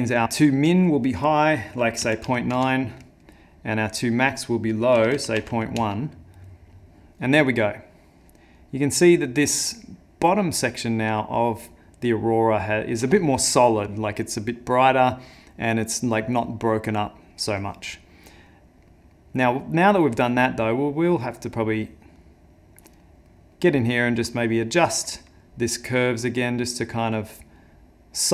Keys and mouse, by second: 0.4 click, 4.0 click, 7.5 click, 18.5 middle click, 19.1 middle click, 19.6 middle click, 21.7 click, 23.1 middle click, 23.5 middle click, 24.3 middle click, 26.0 click, 27.6 click.